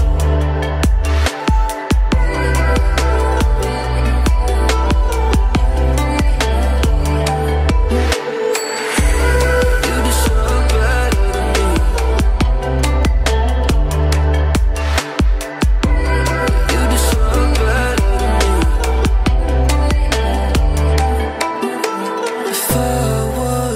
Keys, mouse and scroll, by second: 2.8 ctrl+d, 3.3 alt+scroll down 1, 3.6 alt+scroll up 1, 4.1-6.0 drag, 8.8 ctrl+d, 9.2 alt+scroll down 1, 9.9 alt+scroll up 1, 10.7-11.8 click, 12.8 ctrl+d, 13.5 alt+scroll down 1, 14.4 alt+scroll down 1, 14.7 space, 14.7-15.2 click, 15.0-16.9 space, 17.4 right click, 18.1 click, 18.3 alt+scroll up 1, 19.1 alt+space, 19.2-19.6 click, 19.6 alt+scroll up 1, 20.3-20.9 [, 21.0 [, 21.5-23.2 drag.